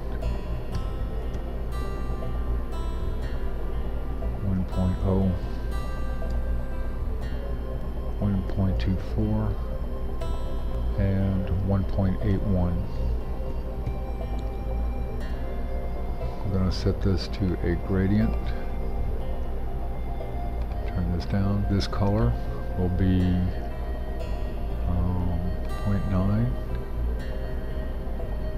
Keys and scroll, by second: 1.1-3.3 typing, 5.2-9.8 typing, 7.7 Tab, 10.2 Tab, 12.7-14.3 typing, 15.3 Tab.